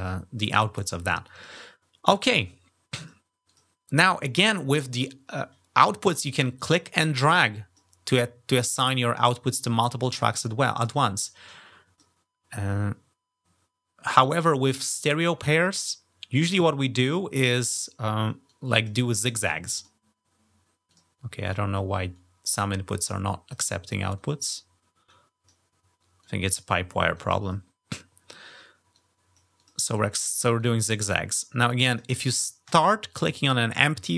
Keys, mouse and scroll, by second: 2.8 click, 3.3 click, 6.4-7.6 drag, 10.7-11.8 drag, 18.3 click, 19.2 click, 20.7 click, 21.2 click, 21.9 click, 22.9 click, 23.9 click, 24.9 click, 26.0 click, 27.0 click, 28.7 click, 29.4 click, 29.7 click, 30.4-31.8 drag, 32.4-34.1 drag.